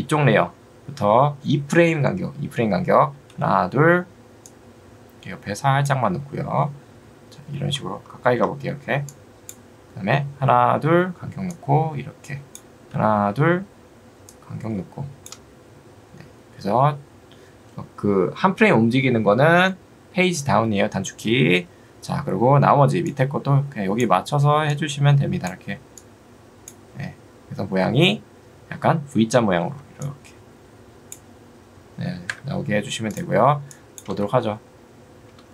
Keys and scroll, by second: 32.3 Escape, 34.1 space.